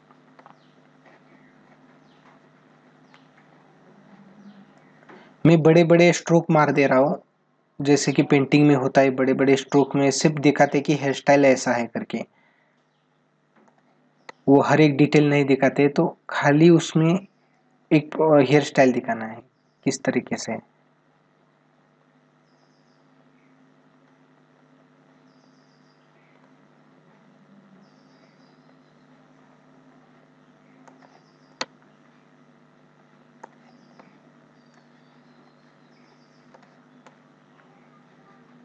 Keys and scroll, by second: 13.3 space, 30.5 space, 33.1 space, 36.2 space.